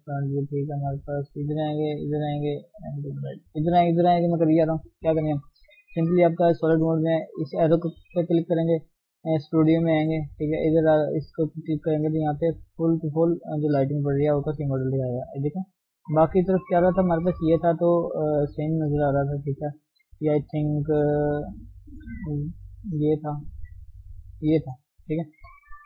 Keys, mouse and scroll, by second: 0.0-1.5 scroll up 1, 1.5-2.0 scroll up 1, 2.0-3.0 drag, 3.0-3.4 scroll down 2, 3.4-14.2 shift+middle drag, 14.2 click, 14.6-15.3 scroll down 3, 15.3-17.4 scroll down 1, 17.4 click, 17.9-19.4 scroll up 1, 19.4-20.6 scroll up 1.